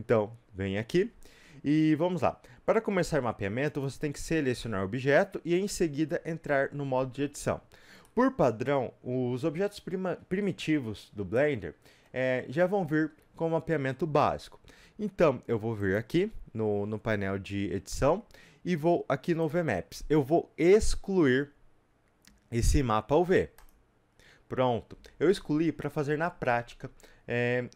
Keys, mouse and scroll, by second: 1.1 scroll up 1, 6.5 Tab, 7.9 scroll up 2, 8.0-23.7 middle drag, 23.7 click.